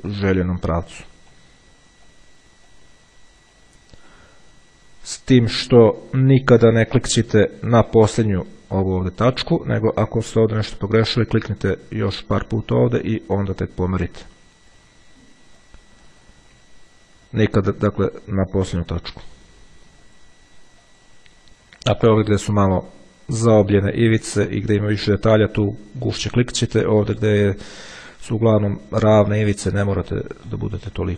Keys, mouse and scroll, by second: 0.5-2.0 drag, 2.3 click, 3.7 click, 5.3 click, 6.8 click, 8.1 middle click, 8.4 click, 12.0-13.2 drag, 13.7 click, 15.8 click, 16.9-18.1 ctrl+scroll down 2, 19.5 click, 20.3 click, 21.1 click, 22.1 click, 24.6 middle click, 28.6 click, 29.7 click.